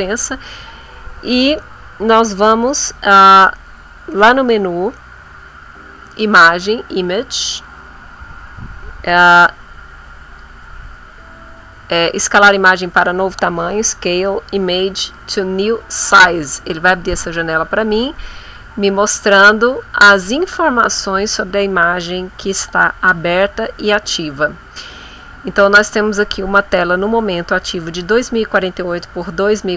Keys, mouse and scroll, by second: 7.0 click, 16.0 click, 17.4-19.6 drag, 22.0 click.